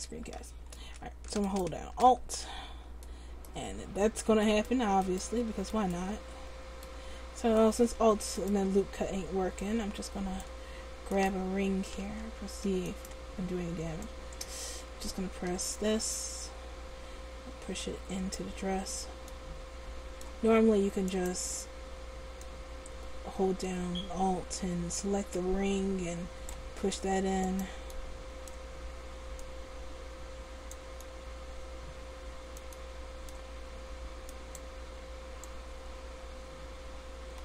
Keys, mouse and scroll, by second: 9.8 middle click, 11.3 middle click, 12.2 ctrl+z, 21.2-24.3 right drag, 22.6 click, 24.3-26.6 middle drag, 27.6 right click, 28.1-29.6 middle drag, 29.6-31.1 drag, 29.6 right click, 31.1 middle click, 34.5-36.9 middle drag, 36.9-37.4 drag.